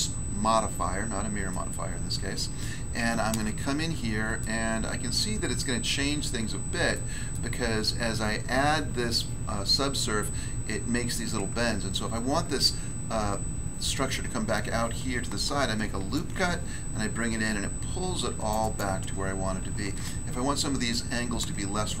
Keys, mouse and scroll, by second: 1.5 middle click, 2.3 middle click, 2.7-3.5 scroll up 1, 3.5-4.4 shift+scroll up 2, 3.6 shift+middle click, 4.8 scroll up 1, 6.4 Tab, 6.9 middle click, 7.3 middle click, 7.7 scroll up 1, 15.6 ctrl+r, 16.1 ctrl+click, 18.3 ctrl+r, 21.5 ctrl+r.